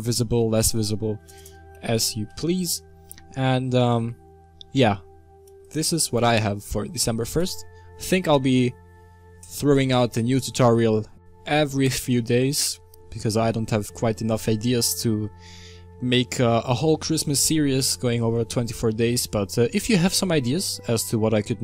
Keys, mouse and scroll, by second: 2.5 BackSpace, 5.5-21.6 drag.